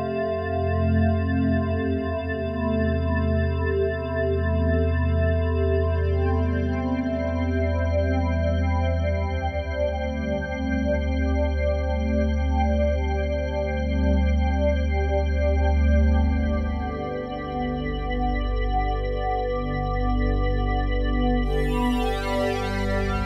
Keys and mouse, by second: 0.2 ctrl+s, 1.3-3.3 drag, 3.3 1, 4.2-7.2 alt+shift+drag, 8.0 click, 8.8 alt+shift+click, 9.3-16.7 ctrl+alt+drag, 17.1 click, 18.8 f, 19.2 click, 20.7 click, 22.2-23.2 drag.